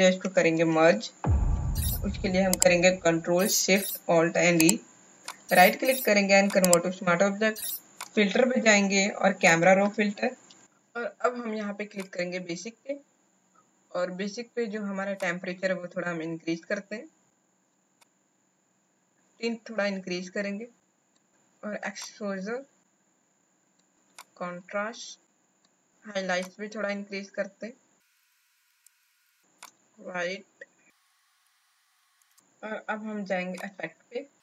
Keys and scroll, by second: 0.5 ctrl+alt+shift+e.